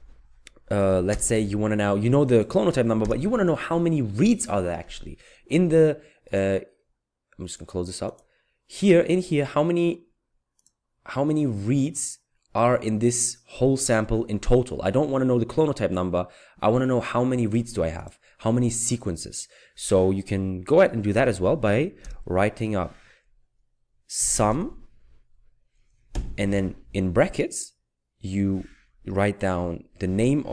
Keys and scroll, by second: 3.1 Return, 22.0 Return, 23.9-25.0 typing, 26.2 typing, 30.3-30.5 typing.